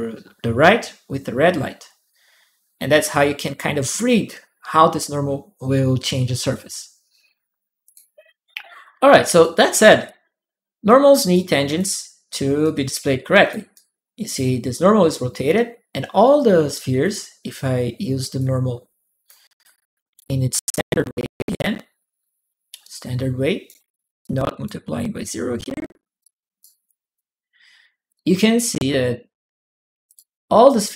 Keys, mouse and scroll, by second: 7.6 click, 7.6 middle click, 9.2 click, 9.3 right click, 9.8-11.5 drag, 10.6 right click, 12.4 click, 13.7 click, 14.1 click, 14.1-16.8 middle drag, 16.8 click, 18.2 click, 19.4 click, 22.7 click, 24.0 click, 26.0 click, 26.6 click, 27.9 click, 29.8 click.